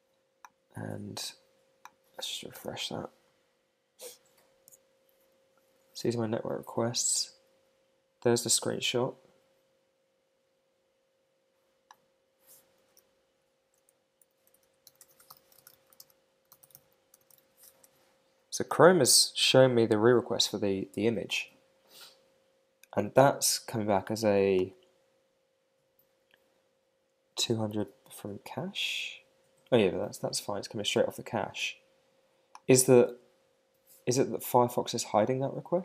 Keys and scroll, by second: 2.5 super+r, 13.4 alt+shift+Left, 16.0 shift+w, 17.7 shift+/, 33.3 super+Tab.